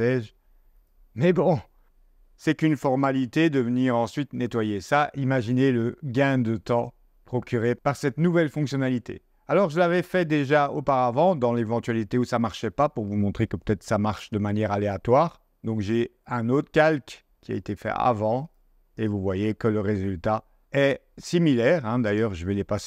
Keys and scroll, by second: 3.0 0.